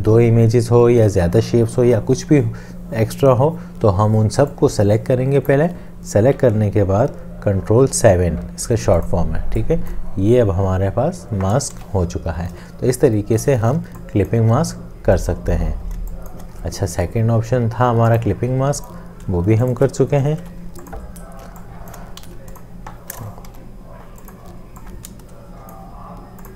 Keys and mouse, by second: 7.8 ctrl+7, 11.8 ctrl+z, 13.8 space, 14.3 click, 19.7 shift+click, 20.8 ctrl+7, 21.5 space, 22.3 ctrl+z, 23.5 Delete.